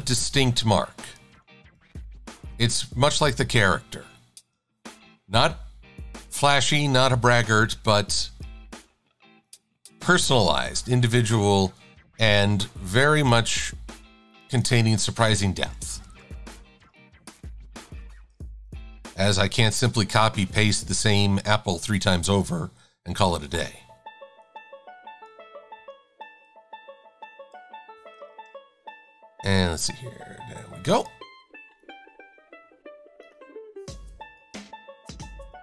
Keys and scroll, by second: 16.1 shift+super+a, 34.6 Delete.